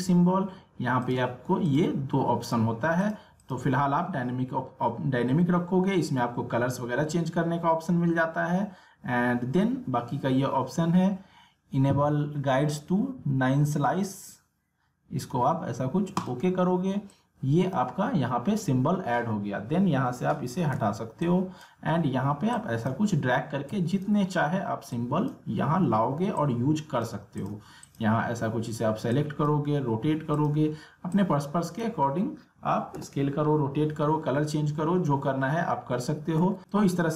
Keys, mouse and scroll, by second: 1.0 click, 2.4 click, 16.2-20.2 drag, 20.7 click, 21.2-36.6 drag, 36.1 ctrl+Num_Lock, 36.6 ctrl+z, 36.6-37.1 drag.